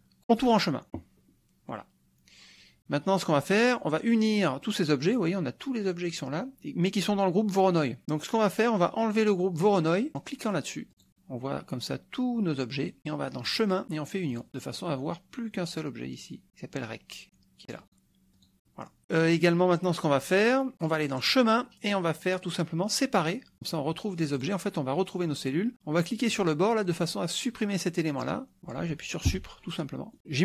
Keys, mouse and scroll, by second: 0.4-1.6 drag, 10.9 click, 13.5 click, 14.3 click, 17.8 click, 18.4 click, 19.0 scroll down 1, 21.3 click, 23.4 click, 24.4 click, 26.3 click, 27.0-28.4 drag, 29.3 Delete.